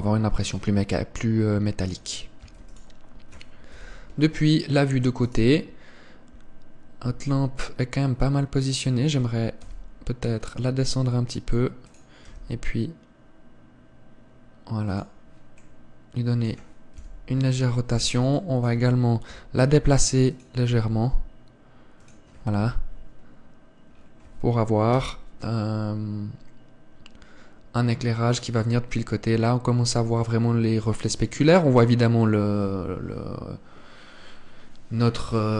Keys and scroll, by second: 3.1 ctrl+s, 4.4 KP_3, 17.7 KP_7, 23.3 KP_3.